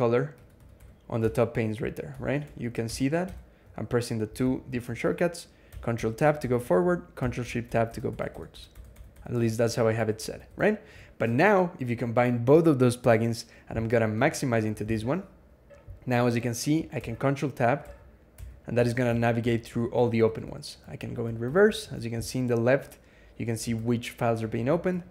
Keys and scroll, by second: 4.4 ctrl+Tab, 4.4 super+0, 4.9 ctrl+Tab, 5.5-6.8 ctrl+Tab, 7.2 ctrl+shift+Tab, 7.5-9.0 ctrl+shift+Tab, 9.2-10.5 ctrl+shift+Tab, 14.7 alt+x, 16.8 ctrl+Tab, 17.6 ctrl+Tab, 19.2 ctrl+Tab, 20.2 ctrl+Tab, 20.8 ctrl+shift+Tab, 21.0 ctrl+shift+Tab, 23.6 ctrl+Tab, 24.0 ctrl+Tab, 24.3-25.1 ctrl+Tab.